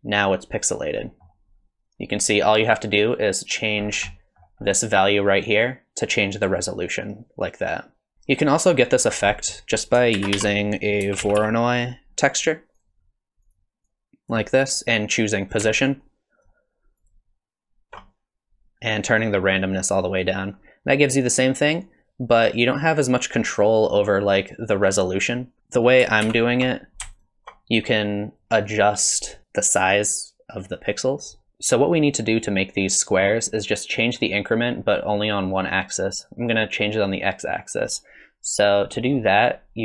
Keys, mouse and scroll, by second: 1.0 middle click, 3.8-4.2 scroll up 5, 4.1 middle click, 5.4 click, 9.1 scroll down 8, 9.2 scroll up 1, 9.3 middle click, 9.7 click, 10.1 shift+a, 13.9 click, 15.8 ctrl+shift+click, 16.5 click, 17.0 ctrl+shift+click, 19.1 click, 25.9 click, 26.3 ctrl+x, 27.2 ctrl+shift+click, 28.4 click, 29.1 click, 38.9 middle click.